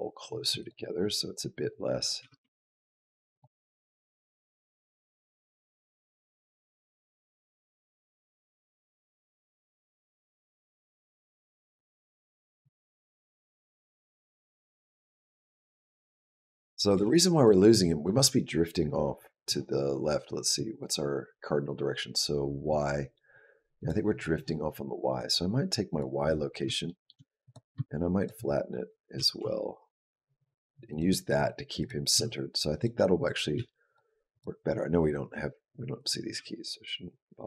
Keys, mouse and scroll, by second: 1.8 click, 2.0 g, 3.9 click, 12.0 click, 12.6 shift+click, 13.0 shift+click, 13.3 g, 16.5 click, 16.7 g, 20.3 click, 20.6 click, 23.6 click, 25.0 click, 25.7 click, 26.7 shift+middle click, 27.3 click, 28.0 shift+click, 29.0 g, 31.1 click, 31.6 click, 31.9 r, 33.1 click, 33.4 s, 34.1 click, 35.8 click, 36.2 g.